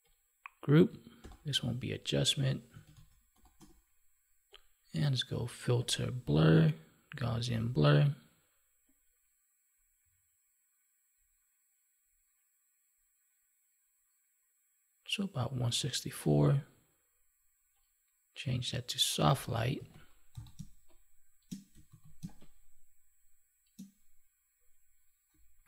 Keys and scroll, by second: 1.1 ctrl+g, 19.7 ctrl+s, 20.5 space, 21.8 ctrl+s, 22.1 space.